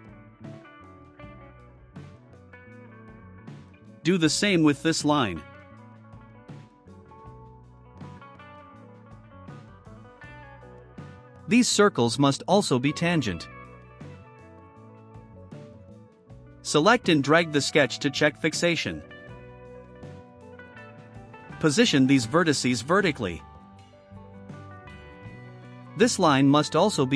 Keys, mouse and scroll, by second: 2.0 click, 6.8 middle click, 7.0 scroll up 1, 7.8 click, 9.2 click, 9.9 scroll down 1, 10.6 middle click, 11.7 middle click, 12.0 middle click, 12.6 click, 13.2 ctrl+click, 14.6 click, 15.6-16.1 scroll down 2, 16.8 scroll down 2, 17.8-20.3 drag, 20.5 click, 21.9 click, 22.8 ctrl+click, 23.7 click, 24.7 click, 25.8 click, 26.6 click.